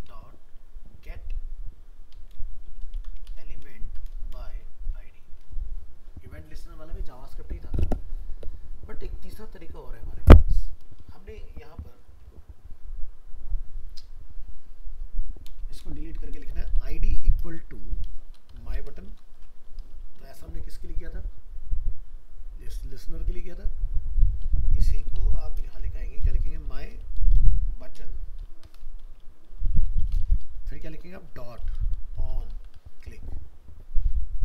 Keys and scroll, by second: 15.5 BackSpace.